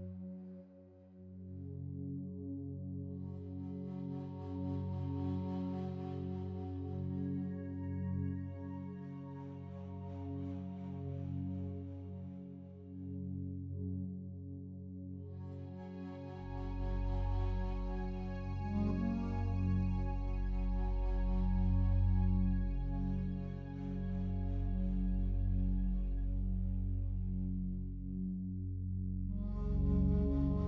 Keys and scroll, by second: 19.2 g, 24.9 Delete.